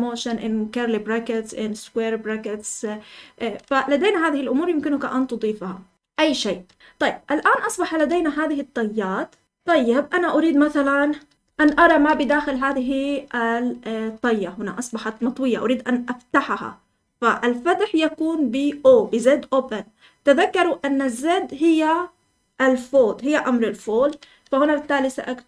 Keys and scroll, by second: 5.9 Escape, 6.7 Escape, 6.8-12.5 typing.